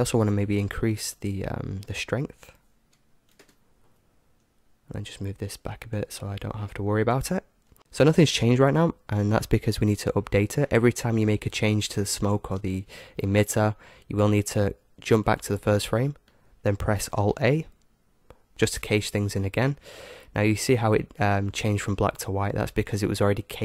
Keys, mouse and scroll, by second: 0.5-3.8 drag, 5.5-7.7 drag, 15.2-17.0 drag, 17.2 alt+a, 23.0-23.6 drag.